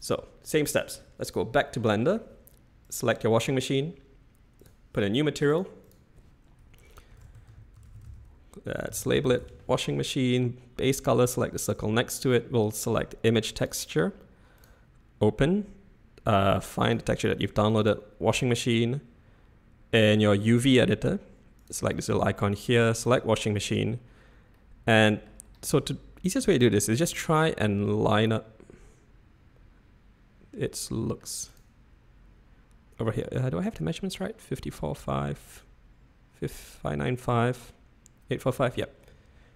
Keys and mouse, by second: 1.1-1.8 middle drag, 4.5 click, 5.3 click, 6.0-10.2 drag, 11.8-13.8 drag, 14.5-15.0 drag, 24.5-25.2 middle drag, 25.8-26.4 shift+middle drag, 27.3-31.2 middle drag, 33.2-33.7 middle drag, 38.8-39.5 middle drag.